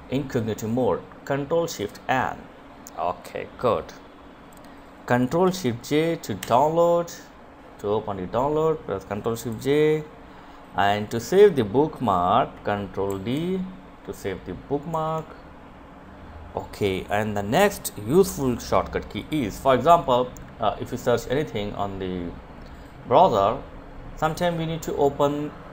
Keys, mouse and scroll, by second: 4.5 ctrl+j, 7.4 click, 11.1 ctrl+d, 12.9 Escape, 17.1 click, 17.7 scroll down 1, 18.6 scroll up 1, 20.3 scroll down 1.